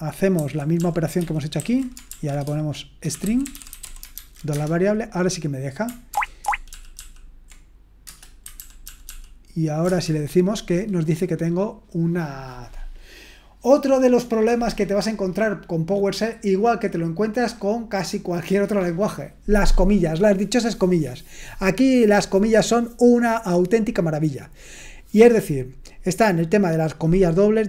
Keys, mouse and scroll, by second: 0.4 ctrl+n, 0.8 ctrl+p, 1.2 ctrl+n, 1.6 ctrl+a, 2.1-4.5 typing, 6.1 ctrl+o, 6.4 ctrl+o, 6.7 ctrl+p, 7.0 ctrl+p, 8.1 Return, 8.6 ctrl+p, 8.8 ctrl+p, 11.4-27.6 scroll down 1.